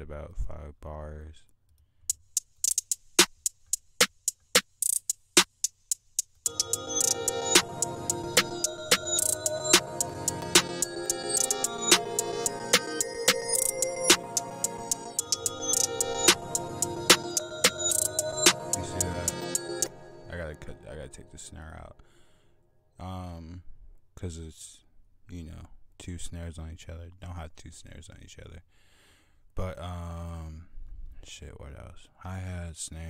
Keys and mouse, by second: 1.5 click, 2.3 click, 5.6-5.9 drag, 6.1 click, 7.5 F1, 7.5 click.